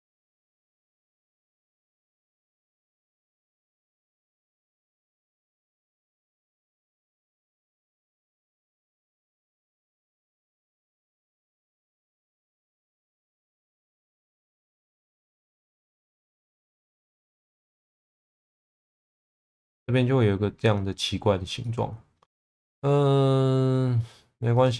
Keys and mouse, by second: 0.1 click, 0.4 shift+v, 0.9 click, 2.1 click, 3.3 click, 3.9 click, 7.1 click, 8.1 click, 9.1 shift+v, 9.8 click, 10.3 click, 10.6 shift+v, 12.2 click, 13.0 click, 14.0 shift+v, 14.6 click, 16.4 middle click, 18.4-19.4 middle drag, 21.6 middle click, 22.7-23.7 middle drag.